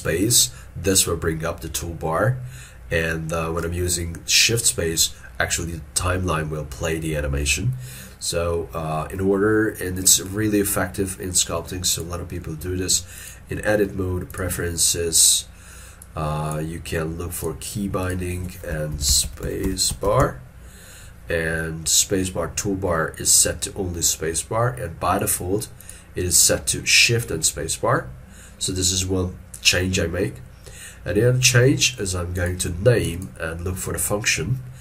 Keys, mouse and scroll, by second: 19.0 shift+s, 19.2 p.